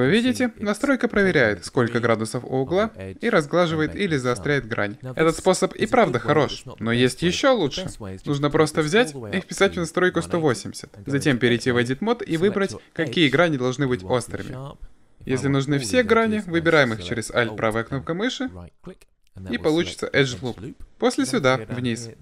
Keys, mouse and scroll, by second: 8.2-10.1 drag, 11.5 Tab.